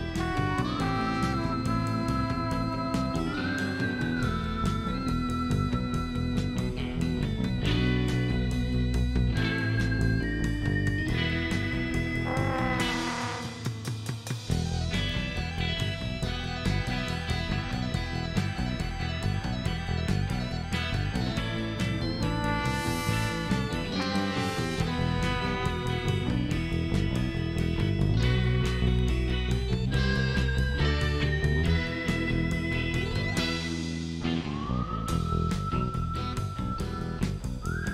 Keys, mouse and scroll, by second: 1.1 click, 3.5 click, 4.9 click, 6.2 click, 7.4 click, 8.8 click, 9.9 click, 10.3 middle click, 12.2 click, 14.3 KP_4, 14.4 KP_Enter, 15.8 click, 16.9 click, 20.4 KP_2, 20.8 ,, 20.9 KP_5, 21.2 KP_Enter, 23.2-25.0 drag, 25.8 KP_2, 26.0 KP_Enter, 26.7 middle click, 29.3 click, 30.4 scroll up 2, 31.0 middle click, 32.2 click, 32.8 click, 33.3 scroll up 1, 34.0 shift+right click, 35.6 shift+right click.